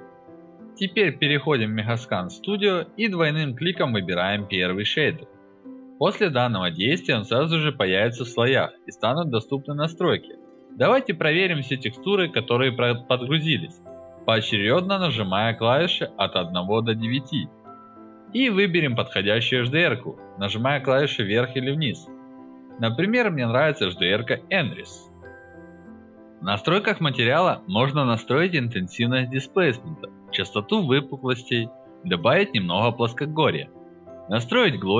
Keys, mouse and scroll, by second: 0.8 click, 4.1 click, 5.5 alt+middle drag, 5.7-6.2 alt+drag, 6.3 alt+right drag, 6.6 alt+drag, 6.9 alt+right drag, 7.1 alt+drag, 7.3 alt+right click, 7.6-7.9 alt+drag, 8.0 alt+right drag, 8.2 alt+click, 9.4 alt+drag, 9.6 alt+right drag, 10.0 alt+middle click, 10.2 alt+drag, 15.8 1, 16.4 alt+middle click, 16.6 alt+click, 19.4 alt+middle drag, 19.7-21.3 alt+drag, 21.4 alt+right drag, 21.8 alt+middle drag, 22.0-24.3 alt+drag, 24.4 alt+right click, 24.7 alt+middle click, 24.9 alt+click, 25.1 alt+right drag, 25.3 alt+middle click, 25.5 alt+click, 26.5 alt+middle click, 26.6 alt+right drag, 26.9 alt+click, 27.1 alt+right click, 27.6-29.8 drag, 30.1-32.3 drag, 32.7-34.9 drag.